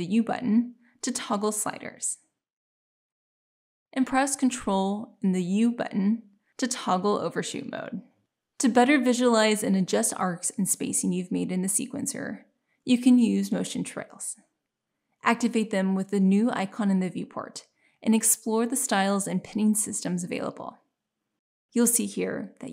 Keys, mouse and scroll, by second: 5.5 ctrl+u.